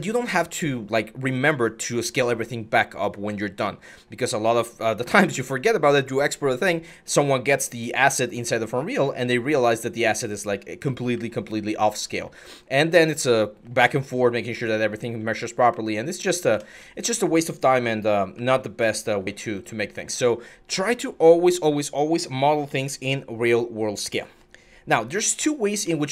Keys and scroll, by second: 7.8 alt+Tab, 8.7 alt+Tab, 10.5-15.5 typing, 16.3 Escape, 17.2-19.8 typing, 24.7 Delete, 25.6 alt+Tab.